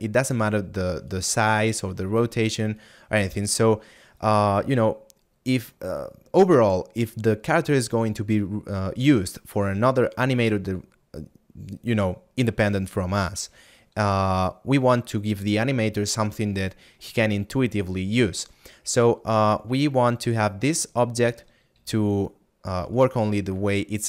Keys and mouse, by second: 1.0 right click.